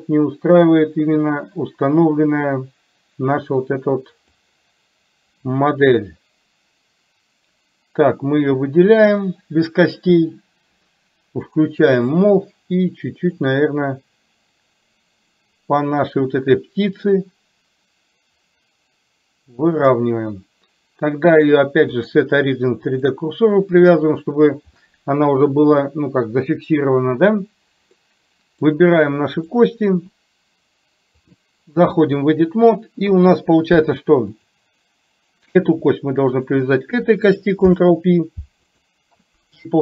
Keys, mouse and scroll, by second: 4.5-6.0 drag, 11.5 click, 13.9-20.0 drag, 21.7-23.3 drag, 28.0-28.8 middle drag, 29.5 click, 31.4-32.4 drag, 33.2 KP_3, 34.5 click, 36.5 shift+click, 37.8 ctrl+p.